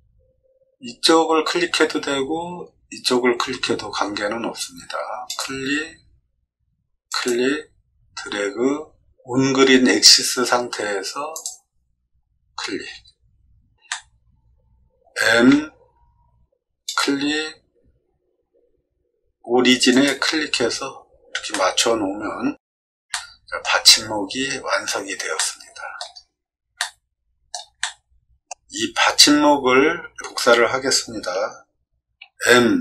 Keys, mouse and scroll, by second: 5.2 click, 7.0 click, 11.3 click, 13.8-15.0 middle drag, 15.1 m, 16.8 click, 20.9 middle click, 21.5 middle click, 22.5 middle click, 23.1 shift+middle click, 25.3 middle click, 26.2 middle click, 26.7 shift+middle click, 27.7 middle click, 32.1 m.